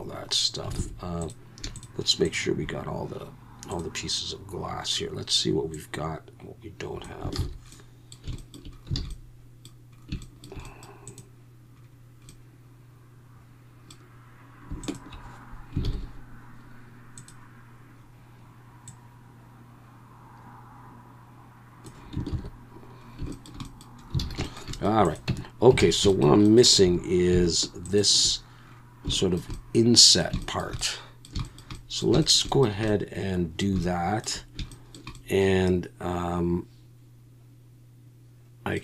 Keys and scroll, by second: 0.8 alt+a, 7.4 ctrl+z, 9.0 alt+a, 15.8 ctrl+j, 22.3 ctrl+z, 24.2 alt+a, 25.3 Tab, 25.8 alt+a, 26.8 2.